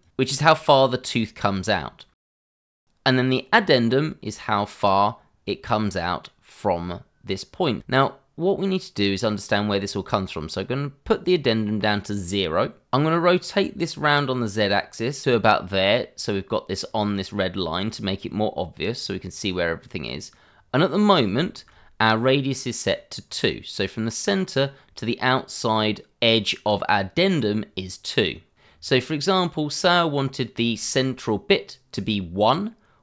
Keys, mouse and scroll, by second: 0.0 click, 3.5 click, 14.0 click, 19.0 scroll down 1, 19.9-21.3 scroll up 1, 21.4 shift+middle click, 21.5 middle click, 23.2-23.7 scroll up 1, 28.7 scroll down 1, 30.2-30.6 scroll up 1, 30.8 shift+middle click.